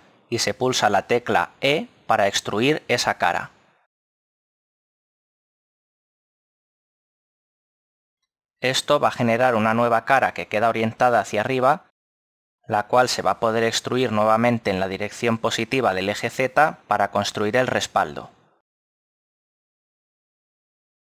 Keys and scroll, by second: 1.7 e.